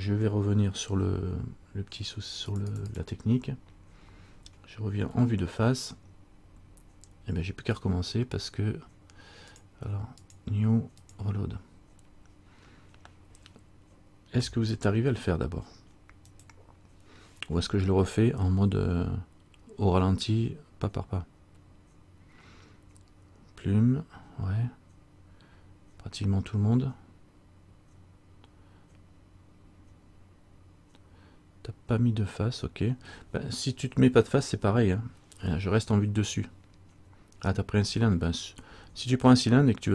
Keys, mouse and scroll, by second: 2.7 click, 2.8 click, 3.0 click, 5.2 KP_1, 9.7 click.